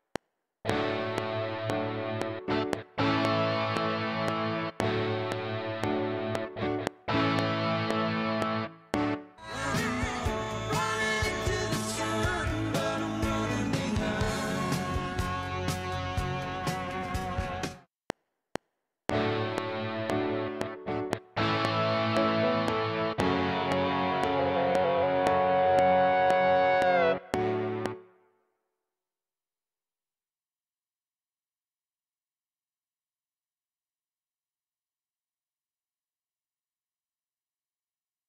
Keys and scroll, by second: 9.1 space, 17.6 space, 17.9 F7, 27.9 space.